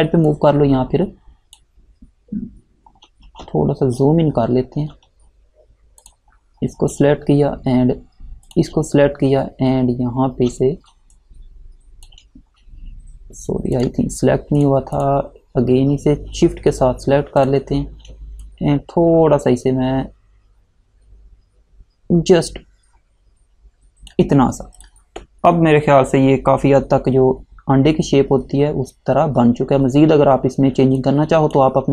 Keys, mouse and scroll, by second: 0.4 click, 4.4 alt+scroll up 1, 6.1 click, 8.6 click, 11.3 click, 13.9 click, 17.5 click, 18.5 click, 28.0 alt+Num_Lock, 28.5 alt+scroll down 1, 30.9 space, 31.1 click, 31.4 space.